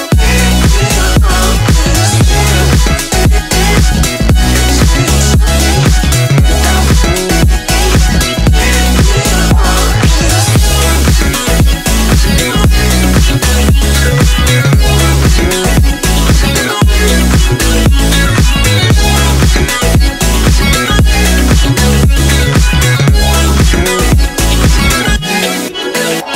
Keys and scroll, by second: 0.9 ctrl+r, 19.8 ctrl+j.